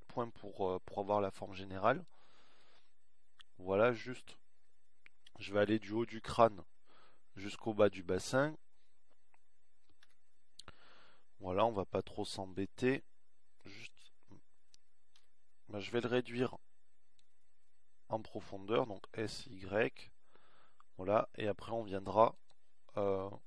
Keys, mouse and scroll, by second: 0.2 a, 1.6 b, 10.7 a, 12.1 b, 15.9 a, 17.1 b, 19.6 s.